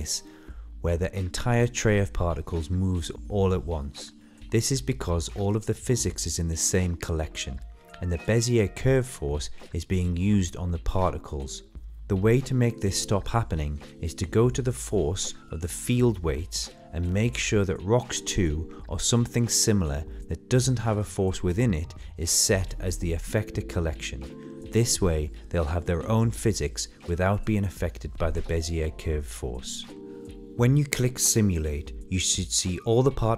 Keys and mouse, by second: 5.7 click, 14.1 click, 15.7-17.2 drag, 25.6-29.4 drag, 29.7 middle click, 31.1-31.7 middle drag, 31.9-33.3 middle drag.